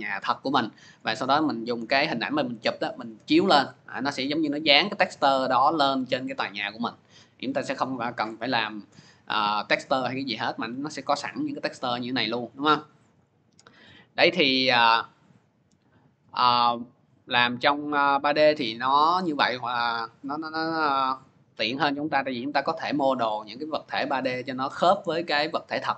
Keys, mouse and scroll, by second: 13.0 click, 15.4-16.2 scroll, 16.7-17.2 scroll, 18.3 scroll.